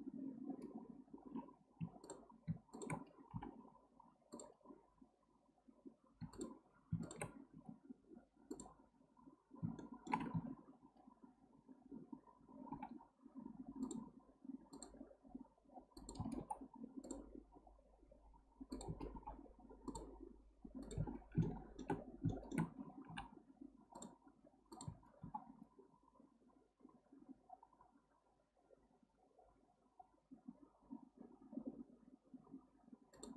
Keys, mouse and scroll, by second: 2.0 click, 2.7 shift+click, 3.3 m, 6.2 2, 6.3 click, 7.0 shift+click, 7.5 x, 9.8-10.3 shift+middle drag, 10.3 1, 12.7 k, 16.4 k, 19.1 k, 21.4 shift+middle click, 22.0-22.3 scroll down 2, 22.3 shift+middle click, 23.1 k, 25.2 k.